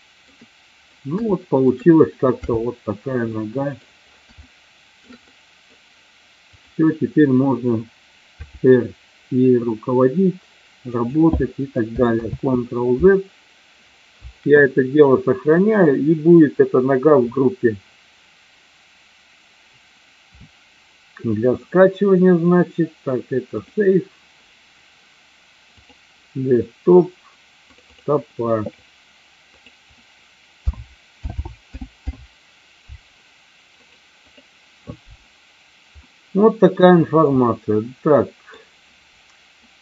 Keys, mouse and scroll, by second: 0.0-0.4 shift+middle drag, 1.4-1.7 shift+middle drag, 2.4 n, 3.4-3.8 middle drag, 4.5-5.1 shift+middle drag, 5.4-5.8 middle drag, 6.6 click, 8.6 r, 11.2 click, 13.2 ctrl+z, 15.6-24.1 drag, 36.1-36.9 middle drag, 37.4-38.6 middle drag.